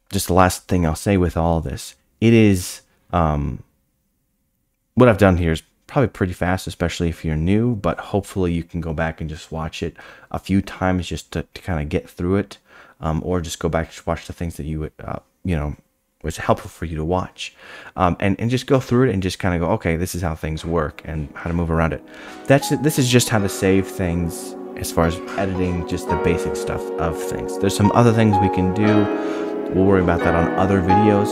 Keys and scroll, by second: 20.4-22.4 scroll down 8.